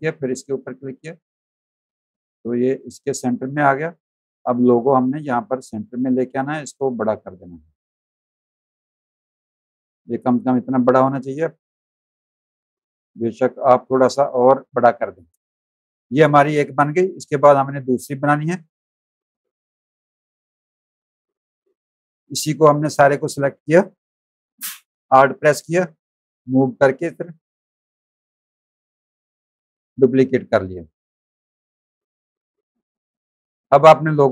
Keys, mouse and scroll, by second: 1.7 click, 2.6 click, 3.2 click, 6.8 alt+shift+click, 9.4 click, 9.9 space, 10.0 click, 10.9 click, 11.3 z, 11.5 alt+click, 11.9 space, 12.1 click, 12.6 v, 12.9 click, 14.1 alt+shift+click, 17.2 click, 19.4 click, 19.9 click, 21.4 click, 26.2 alt+click, 31.4 click, 32.0 v, 32.3 click, 32.7 space, 32.8 click, 33.6 click.